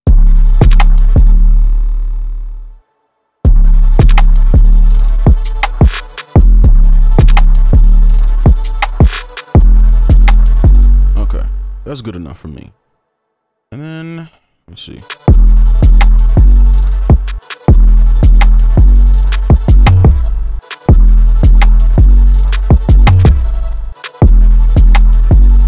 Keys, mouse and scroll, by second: 0.3 right click, 0.3 space, 1.7 space, 3.4 space, 6.4 space, 6.6 space, 8.0 right click, 13.5-14.9 scroll up 1, 14.9 space, 17.1 space, 17.3 space, 20.2 space, 20.5 space, 23.7 space, 23.9 space, 24.4-25.2 scroll up 1, 25.2 right click.